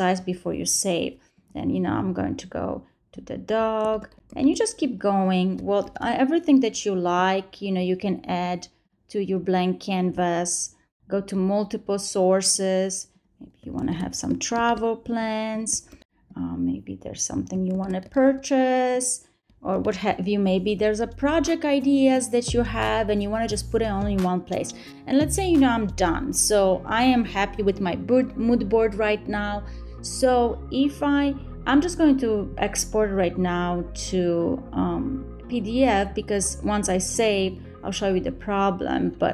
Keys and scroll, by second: 3.7 super+a, 4.1 super+c, 5.0 super+v, 9.2 super+a, 9.7 super+c, 10.3 super+v, 16.2 super+a, 16.6 super+c, 17.4 super+v, 20.8 super+a, 21.6 super+c, 21.9 super+v.